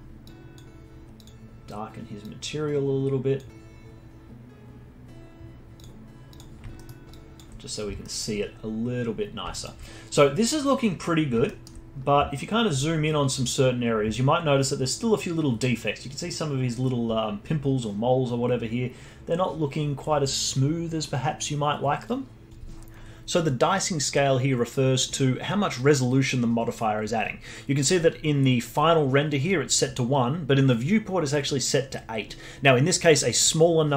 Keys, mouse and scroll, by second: 0.2 click, 4.5 click, 5.7 click, 6.3 click, 6.7-7.1 alt+middle drag, 7.1-8.0 alt+drag, 8.0-9.3 alt+middle drag, 9.3 scroll down 1, 9.5-11.4 alt+drag, 11.4-11.9 alt+middle drag, 11.9-12.9 scroll up 3.